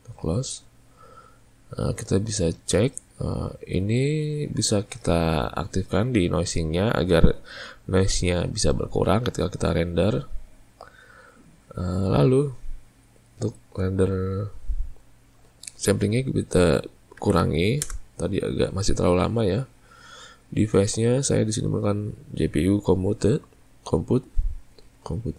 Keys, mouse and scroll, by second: 2.0 click, 10.2 click, 16.0-19.1 drag, 21.1-24.2 drag.